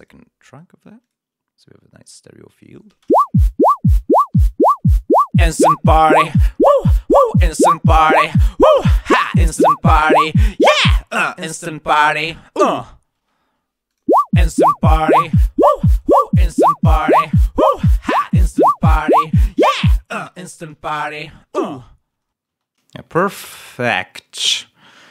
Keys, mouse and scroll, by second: 2.9 shift+space, 13.2 space, 13.8 click, 14.0 space, 14.9 click, 15.7 click, 16.4 click, 20.1 shift+v, 20.3 shift+o, 20.6 shift+x, 20.8 shift+Return, 23.0 space, 23.0 click, 23.4 ctrl+click.